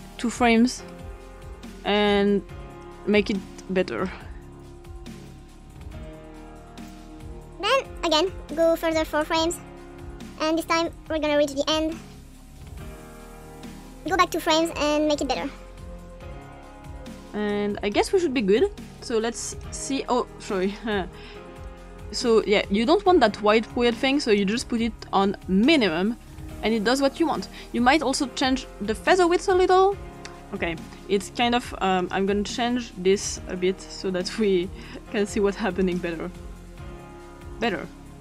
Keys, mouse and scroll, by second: 0.8-1.5 scroll up 2, 1.5-2.3 scroll up 1, 2.8 click, 4.1 click, 4.9 click, 5.6 click, 6.2 click, 6.7 click, 7.7 click, 8.9 click, 9.1 click, 9.7 click, 10.1 click, 11.1 click, 11.6 click, 12.0 click, 12.5 click, 12.9 click, 13.9-14.5 scroll up 2, 14.5 click, 15.1 click, 16.2 click, 16.5 click, 17.5 click, 19.6 click, 24.4 click, 25.6 click, 29.1 click, 30.4 click, 32.0 click, 33.4 click, 34.8 click, 35.8 click, 37.5 click.